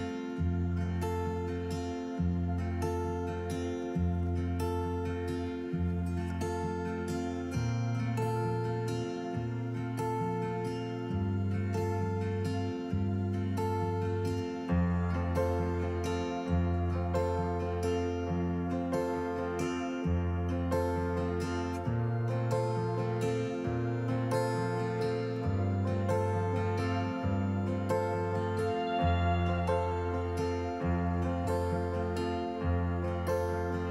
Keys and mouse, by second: 0.3 click, 3.9 click, 4.8-6.7 drag, 14.4 click, 28.4-29.3 drag.